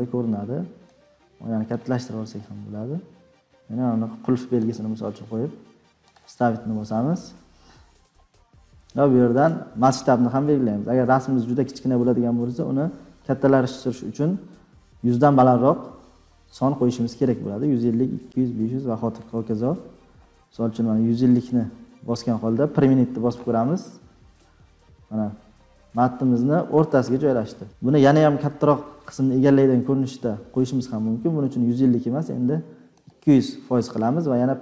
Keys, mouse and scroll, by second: 0.8 click, 1.9 scroll, 23.2 click, 25.9 click, 28.3 click, 31.5 click, 33.1 click.